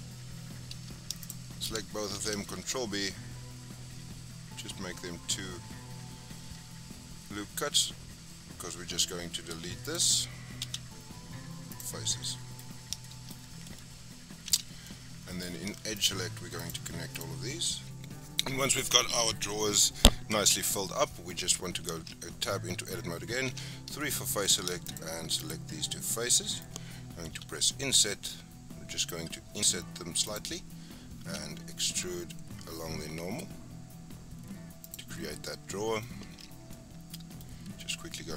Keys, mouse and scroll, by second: 1.2 shift+click, 2.1 ctrl+b, 10.6 x, 12.2 middle click, 12.6-13.0 scroll up 1, 13.0 shift+middle click, 13.3-13.9 scroll up 1, 13.9-14.4 scroll up 1, 14.4 2, 14.8-15.9 middle drag, 15.9 shift+click, 16.5 shift+click, 17.1 shift+click, 17.8 shift+click, 18.0-18.9 scroll down 2, 21.9 Tab, 22.3-23.4 scroll up 5, 23.4 3, 23.9 middle click, 24.8 shift+click, 25.3 shift+click, 25.8 shift+scroll down 4, 26.0-27.3 middle drag, 27.3 i, 31.2 e, 35.2 scroll down 3, 35.3 middle click, 36.2 Tab, 36.7-37.4 middle drag, 37.4-38.3 scroll up 4.